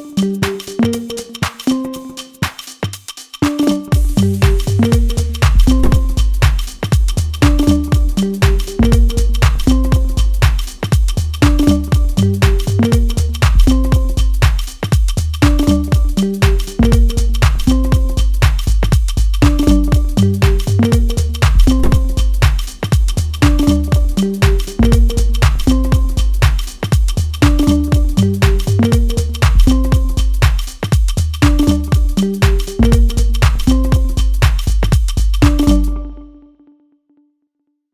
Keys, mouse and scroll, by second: 0.1 shift+f, 1.0 click, 1.8 scroll down 2, 2.2 middle click, 3.1 click, 5.7-7.2 scroll down 2, 5.9 middle click, 7.3 middle click, 8.0 click, 10.8 scroll down 2, 11.0 middle click, 11.9 click, 13.4 scroll down 1, 13.5 middle click, 13.9 scroll up 2, 14.7 click, 16.5 scroll down 2, 16.6 middle click, 17.2 scroll up 5, 17.4 middle click, 18.1 click, 21.0 scroll down 2, 21.1 middle click, 21.6 scroll up 3, 21.9 click, 22.6 scroll down 1, 22.8 middle click, 23.7 click, 25.7 middle click, 26.5 click, 28.1 scroll down 2, 28.3 middle click, 29.0 middle click, 29.7 click, 31.2 scroll down 1, 31.7 middle click, 31.7 scroll down 2, 32.3-32.7 scroll up 3, 33.0 middle click, 33.4 shift+middle click, 33.8 middle click, 34.2 scroll up 1, 34.9 click, 37.7 click.